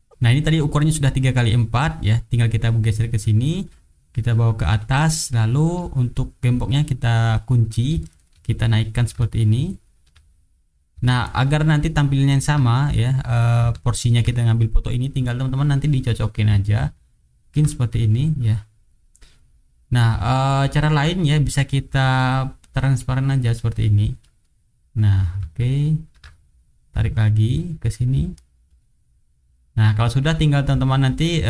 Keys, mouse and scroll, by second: 0.2 click, 0.6 middle click, 1.2 middle click, 1.8 middle click, 2.6-3.8 drag, 4.8 click, 7.2 click, 8.0 shift+right click, 9.0-10.1 ctrl+drag, 10.7-12.4 ctrl+drag, 12.8 ctrl+middle click, 13.3 ctrl+click, 15.6 middle click, 16.3-17.5 ctrl+drag, 22.0 click, 23.4 click, 24.4 middle click, 25.1-26.2 ctrl+drag, 27.0-28.5 drag, 28.6 click, 29.7 middle click, 30.7-31.4 drag.